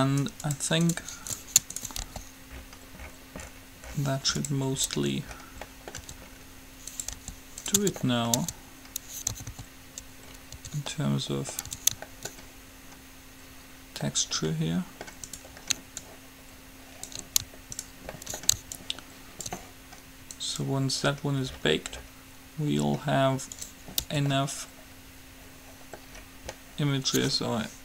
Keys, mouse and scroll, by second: 2.2 g, 5.2 Tab, 6.2 Tab, 7.5 g, 8.0 Tab, 8.5 Tab, 9.5 a, 9.7 a, 10.8 Tab, 11.5 middle click, 12.0 Tab, 15.5 middle click, 16.2-17.3 drag, 16.2-17.3 right drag, 17.3 middle click, 17.5 click, 18.0 right click, 18.3-20.0 middle drag, 19.0-20.8 drag, 19.0-20.0 right drag, 20.6-22.2 right drag, 24.2 Tab, 26.3 middle click.